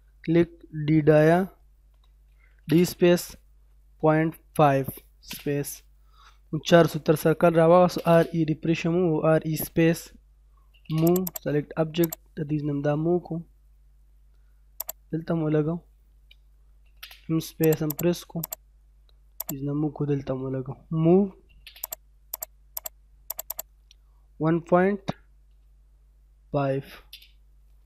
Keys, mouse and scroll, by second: 0.9 f, 2.3 d, 2.5 space, 3.7-5.1 typing, 5.6 scroll up 1, 7.1-8.0 typing, 8.2 scroll down 1, 8.5 middle click, 10.5 typing, 11.0 click, 11.3 right click, 12.0 click, 12.3 scroll down 1, 12.8 middle click, 13.2 scroll down 1, 14.0-14.8 scroll up 1, 14.8 click, 15.2 scroll up 1, 16.6 typing, 17.6 click, 17.9 right click, 18.5 click, 19.8 scroll down 1, 19.9 middle click, 21.2 m, 21.4 space, 21.8 click, 23.1 scroll down 1, 23.3 right click, 23.5 click, 24.7 1, 26.5 5, 26.9 space.